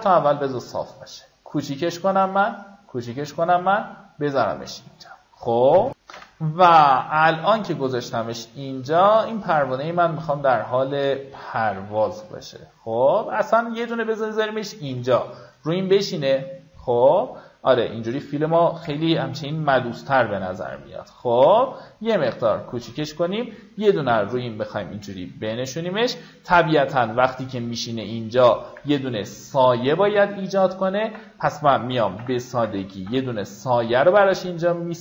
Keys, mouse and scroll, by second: 1.0-3.6 shift+drag, 6.5 F9, 7.6 click, 8.8 alt+scroll up 1, 9.6-11.6 drag, 13.0-15.0 drag, 16.3 alt+scroll down 1, 17.9 alt+scroll up 1, 18.3 click, 20.6 shift+click, 24.3-24.7 scroll down 2, 25.0 alt+scroll down 1, 26.4-26.9 alt+scroll up 2, 28.6-29.0 alt+scroll up 1, 29.3 click, 31.0 ctrl+click, 32.5 ctrl+alt+shift+n, 33.4 ctrl+alt+shift+b, 34.2 alt+right click.